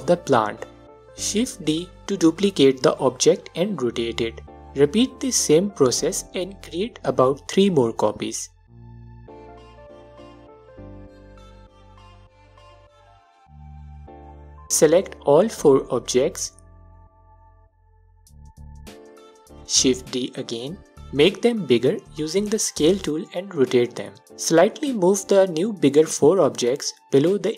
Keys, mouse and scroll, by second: 2.1 shift+d, 2.6 space, 3.6 ctrl+click, 5.3-15.6 drag, 7.7 shift+d, 8.1 space, 10.9 shift+d, 11.3 space, 16.1 shift+click, 17.5-23.8 alt+drag, 19.8 shift+d, 22.3 space, 22.9 s, 24.8-27.5 drag.